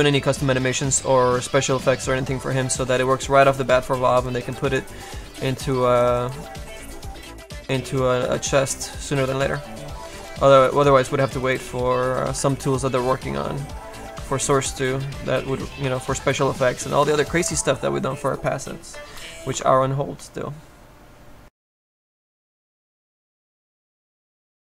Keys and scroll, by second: 2.4 space.